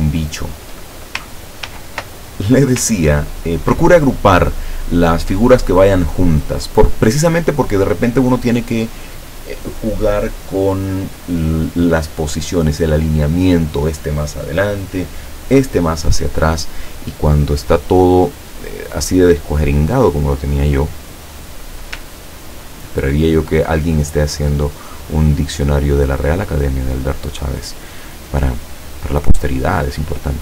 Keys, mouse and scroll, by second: 0.3 shift+click, 1.8 ctrl+g, 2.5-3.5 ctrl+scroll down 7, 17.6 click, 20.2 click, 22.6-23.0 ctrl+scroll up 4, 23.3-24.3 ctrl+scroll up 6, 25.1 click, 25.7 click, 29.7-30.4 drag.